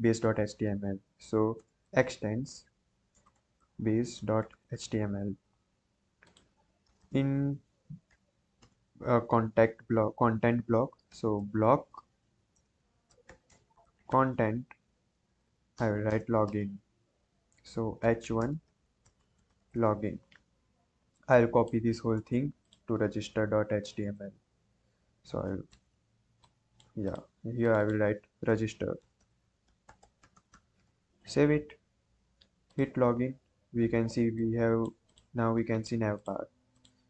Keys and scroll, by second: 1.5-5.2 typing, 2.4 Return, 6.8 Return, 7.3 Return, 8.0 b, 8.5 BackSpace, 10.8-14.4 typing, 12.2 Down, 12.5 Return, 14.8 Escape, 15.1 Right, 15.2 Right, 15.4 Right, 16.0 Right, 16.8 shift+Up, 17.7-20.0 typing, 22.1 ctrl+c, 23.0 ctrl+v, 24.2 ctrl+z, 25.0 ctrl+a, 25.6 ctrl+v, 28.7-30.9 typing.